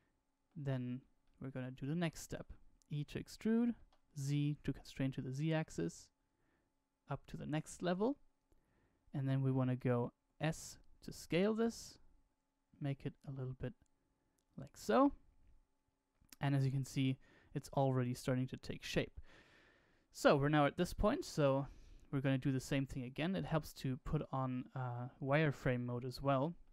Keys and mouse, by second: 1.2 shift+middle click, 10.1 s, 16.6-18.9 middle drag, 19.4 KP_1, 20.6 middle click, 21.7 shift+middle click, 25.5-26.7 shift+middle drag.